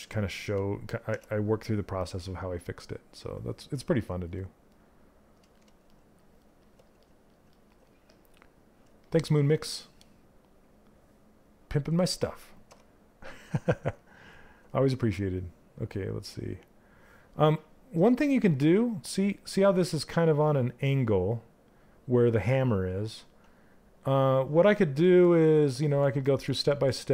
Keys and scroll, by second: 0.6 w, 12.1 q.